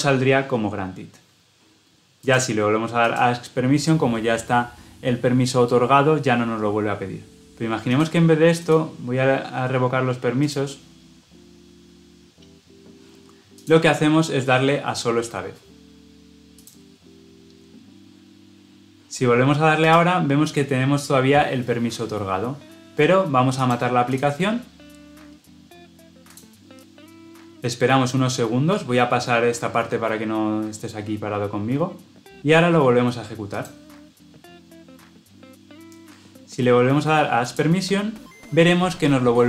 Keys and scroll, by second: 33.5 shift+F10.